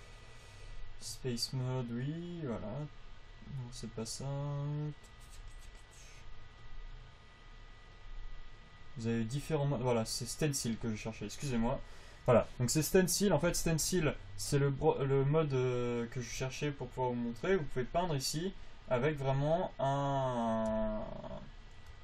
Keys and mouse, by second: 13.8 f, 17.8-19.5 drag.